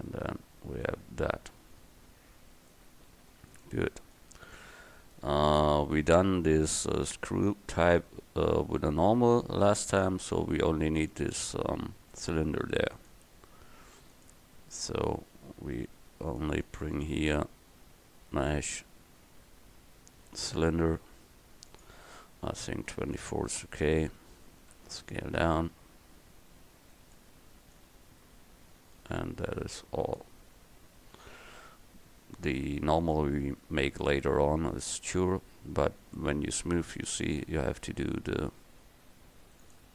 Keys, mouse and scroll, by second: 24.8 s, 35.6 Tab, 37.7 ctrl+r.